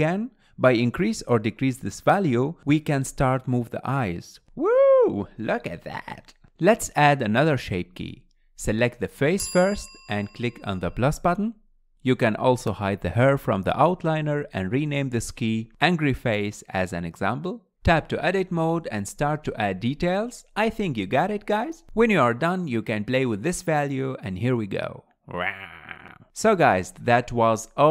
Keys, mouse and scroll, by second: 0.2 scroll up 1, 0.4 shift+middle click, 0.6-2.1 drag, 3.3-4.1 middle drag, 4.2 middle click, 7.2 scroll up 2, 8.5 Tab, 11.6-14.8 drag, 15.9 click, 16.5-17.2 drag, 18.4 Tab, 19.3-20.0 scroll up 2, 20.0 click, 20.2-22.3 typing, 21.8 middle click, 22.1 middle click, 22.2 click, 22.4 middle click, 22.7-24.0 drag, 26.4-27.9 scroll down 1.